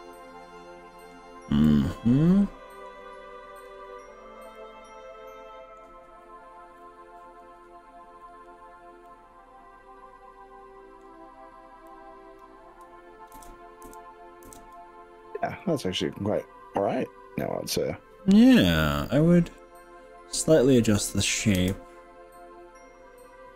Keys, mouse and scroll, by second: 1.6-3.0 middle drag, 3.6 click, 4.0-4.5 scroll down 3, 4.5-5.8 middle drag, 9.2-11.2 middle drag, 11.9 click, 13.4 ctrl+KP_Add, 14.0 ctrl+KP_Add, 14.6 ctrl+KP_Add, 15.6 middle click, 21.6 s.